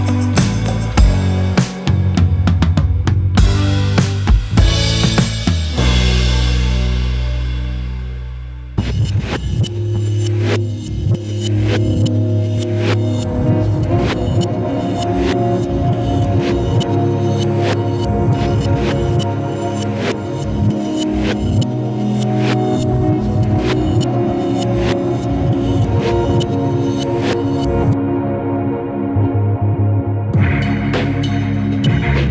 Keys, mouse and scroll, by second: 0.9 click, 1.0-1.4 scroll down 13, 1.4 scroll up 4, 1.6-3.5 shift+middle drag, 3.5 click, 4.2 click, 5.1-5.4 scroll up 2, 5.4 KP_Decimal, 5.9 KP_Decimal, 7.0 x, 7.7 shift+middle click, 8.4 drag, 9.1 shift+d, 11.0 r, 12.0 shift+middle click, 13.0-14.8 typing, 14.3-14.8 middle drag, 15.7 ctrl+z, 15.8 ctrl+z, 16.4 r, 17.0 ctrl+z, 17.4 r, 18.2-19.0 shift+middle drag, 19.0 g, 20.4-21.4 middle drag, 21.4 scroll up 3, 21.5-22.3 middle drag, 22.3 g.